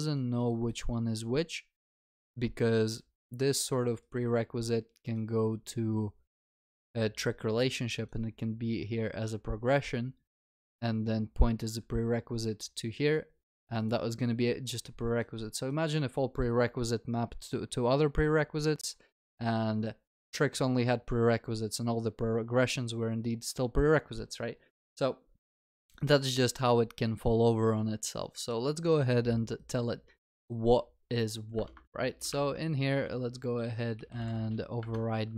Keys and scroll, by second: 32.3 alt+Insert.